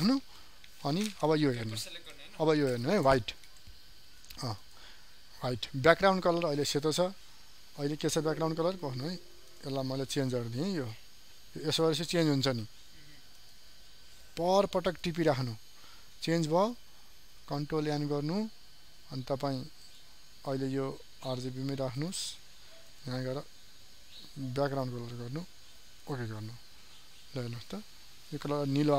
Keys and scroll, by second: 17.3 ctrl+n.